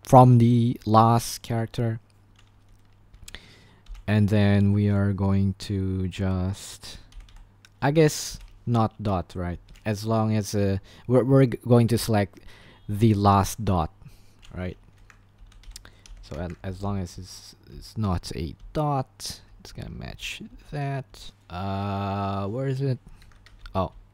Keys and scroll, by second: 3.8 typing, 7.0-10.0 typing, 8.0 Escape, 15.1 Escape, 15.1-21.8 typing, 23.2-24.1 typing.